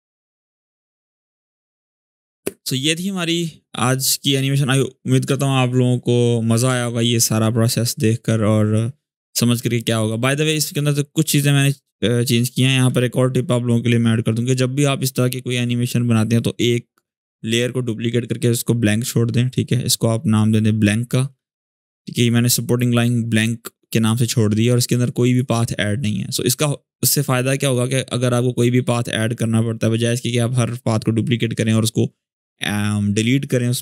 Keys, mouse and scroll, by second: 9.5-10.1 click, 10.3 ctrl+a, 11.2 click, 11.6 click, 19.3-21.1 drag, 21.5 Return, 23.0 click, 26.2 g, 27.4-28.4 drag.